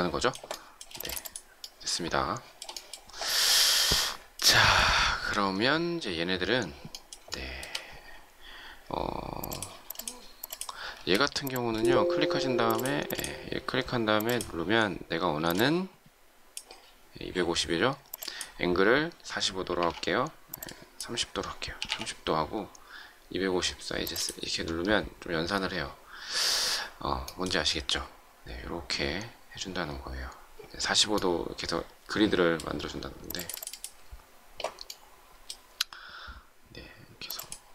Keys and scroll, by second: 0.8 shift+space, 10.9 space.